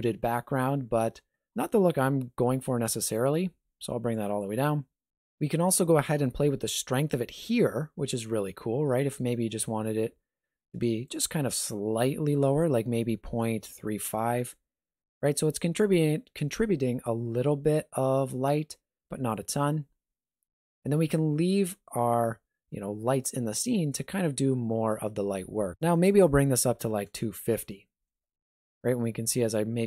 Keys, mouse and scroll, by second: 0.8 alt+shift+z, 3.0 click, 25.8 click, 28.3 g.